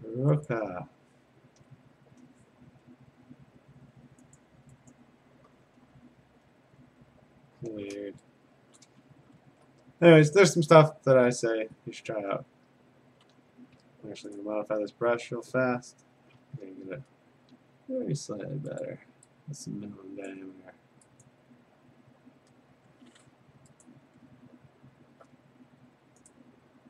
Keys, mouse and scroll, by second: 0.5 click, 1.7 Return, 4.4 click, 4.9 click, 5.7-6.3 alt+scroll down 7, 6.6-7.0 scroll up 5, 7.0-8.0 scroll, 8.8 click, 9.1-10.0 scroll, 12.1 middle click, 12.3 ctrl+z, 13.9 b, 14.4 right click, 15.9 Escape, 16.5 F5, 17.0 F5, 18.8 click, 20.3 click, 21.3 click, 22.5 F5, 23.9 click, 24.1 a, 24.6-25.3 scroll, 25.5 middle click, 26.4 right click.